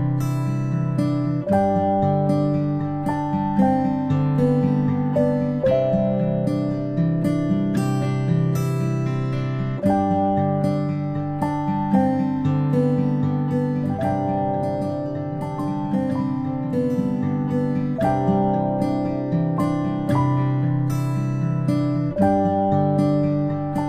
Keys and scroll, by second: 4.5 ctrl+i, 6.5 v, 11.4 a, 22.9 ctrl+p.